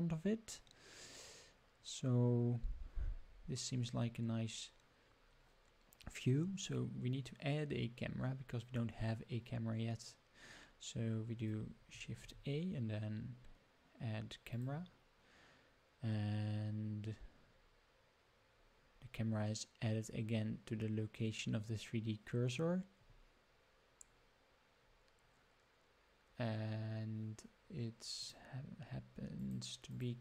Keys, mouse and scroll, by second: 12.2 shift+a, 28.1 click, 29.3 click, 29.8 click.